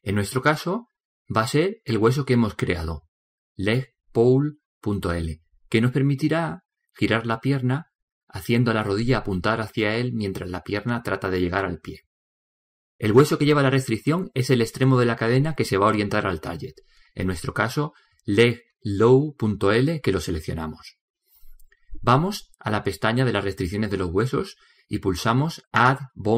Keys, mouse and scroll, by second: 2.3-3.4 middle drag, 4.3 right click, 23.3-25.0 drag.